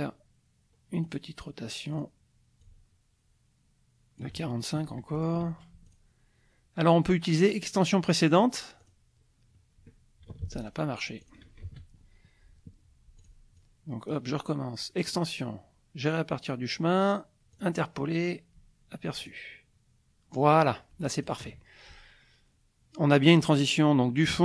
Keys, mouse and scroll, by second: 1.0 click, 1.9 click, 2.6-4.4 ctrl+drag, 5.1 shift+click, 5.9 shift+click, 8.8 click, 10.4 ctrl+z, 10.6 ctrl+click, 11.2 ctrl+shift+click, 11.6 ctrl+shift+z, 13.2 click, 13.6 click, 15.1 click, 17.5 click, 19.2 click, 20.6 click.